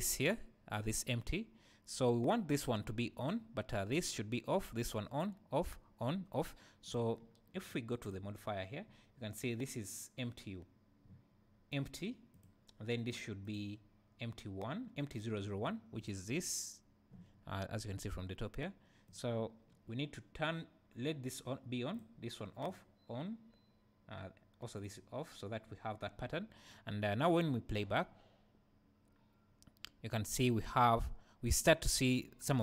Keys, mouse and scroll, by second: 0.2 click, 3.2 click, 6.8 click, 8.0 click, 12.3 click, 13.1-15.1 drag, 16.0 click, 19.1 click, 21.9-25.7 drag, 27.7 space.